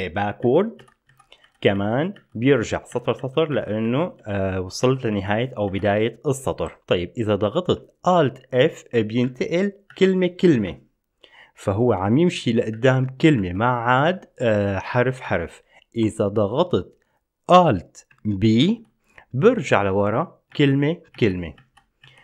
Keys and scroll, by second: 0.6 ctrl+b, 1.0 ctrl+b, 1.3 ctrl+b, 2.0 ctrl+b, 2.4 ctrl+b, 2.7 ctrl+b, 3.1 ctrl+b, 3.4 ctrl+b, 3.7 ctrl+b, 4.0 ctrl+b, 4.7 ctrl+b, 5.0 ctrl+b, 5.3 ctrl+b, 5.9 ctrl+b, 8.6 alt+f, 9.4 alt+f, 10.1 alt+f, 10.7 alt+f, 12.9 alt+f, 15.4 alt+f, 18.9 alt+b, 19.9 alt+b, 20.7 alt+b, 21.3 alt+b, 21.7 alt+b.